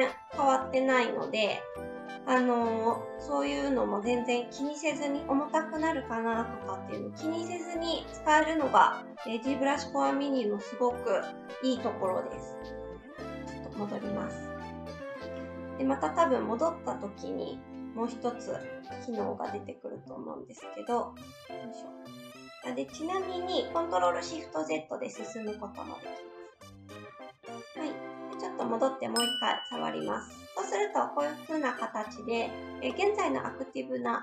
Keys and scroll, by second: 12.0 ctrl+z, 12.4 ctrl+z, 18.6 ctrl+alt+z, 19.2 ctrl+z, 21.5 ctrl+shift+z, 22.1 ctrl+shift+z, 24.3 ctrl+shift+z, 24.5 ctrl+shift+z, 26.9 ctrl+z.